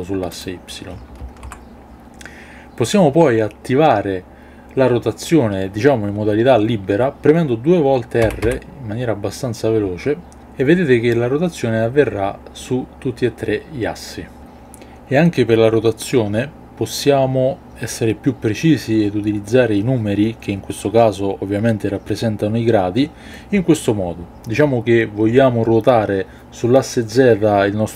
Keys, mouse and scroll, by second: 1.2 alt+r, 8.2 r, 8.4 r.